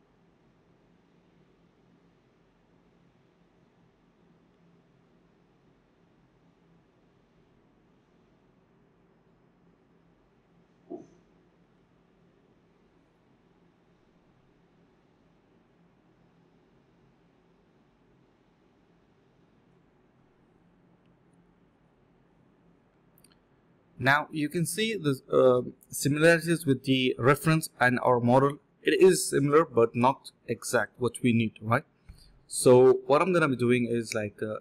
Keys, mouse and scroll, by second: 0.3 alt+click, 0.5 alt+click, 1.0 alt+click, 2.4 typing, 4.3 alt+click, 4.7 alt+click, 6.9 alt+click, 7.2 alt+click, 7.5 typing, 8.0 alt+click, 8.5 alt+click, 9.9 2, 10.3 alt+click, 10.7 alt+click, 11.3 alt+click, 12.2 alt+click, 12.4 alt+click, 13.5 ctrl+z, 13.6 ctrl+z, 13.7 ctrl+z, 14.0 ctrl+z, 15.6 alt+click, 15.8 alt+click, 16.0 ctrl+b, 16.3 double click, 16.6-17.0 typing, 17.7 double click, 18.2 shift+click, 18.3 shift+double click, 18.4 shift+click, 19.2 double click, 19.8 shift+click, 19.9 shift+double click, 20.0 shift+click, 20.7 alt+click, 20.9 alt+click, 21.0 alt+click, 22.3 scroll down 1, 22.5 middle click, 22.9 scroll up 1, 23.5 scroll down 1, 23.7 middle click, 29.0 typing, 30.3 alt+click, 30.5 alt+click, 30.7 ctrl+b, 31.0-31.5 typing, 31.8 double click, 32.4 shift+click, 32.5 shift+double click, 32.6 shift+click, 32.8 double click, 33.1 shift+click, 33.2 shift+double click, 33.4 double click, 33.7 shift+click, 33.7 shift+double click, 34.0 double click, 34.4 shift+click, 34.5 shift+double click, 34.5 shift+click.